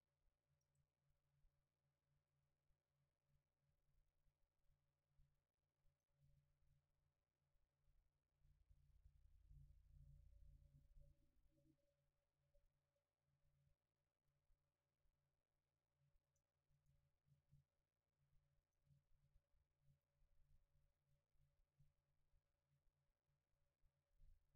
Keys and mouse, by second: 1.5-4.1 drag, 16.3-18.7 right drag, 18.7-21.8 drag.